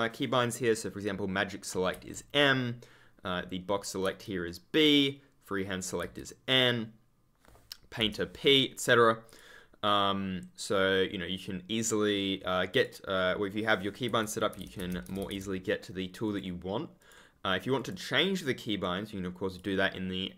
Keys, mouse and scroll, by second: 4.0 click, 9.2 click, 12.6 click, 14.3-15.7 typing, 16.2 click.